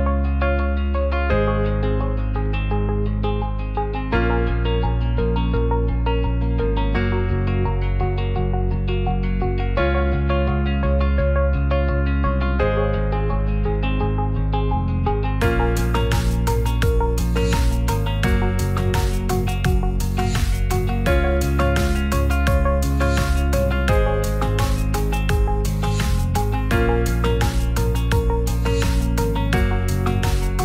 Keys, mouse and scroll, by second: 0.8 click, 1.7-2.3 drag, 3.0 click, 3.6 click, 4.5 shift+click, 5.2 click, 5.7-6.9 shift+drag, 7.2 right click, 8.0-8.7 middle drag, 9.3-11.3 shift+drag, 11.6 middle click, 12.5 middle drag, 13.0 shift+a, 15.7-17.0 drag, 18.1 ctrl+a, 19.8 r, 20.0 KP_9, 20.0 KP_0, 20.3 KP_Enter, 21.1 click, 21.9 middle drag, 22.4 Tab, 22.9 ctrl+r, 24.2 click, 26.0 3, 26.3 click, 27.3 shift+click, 28.6 x, 29.9 middle click, 30.2 Tab, 30.5 Tab.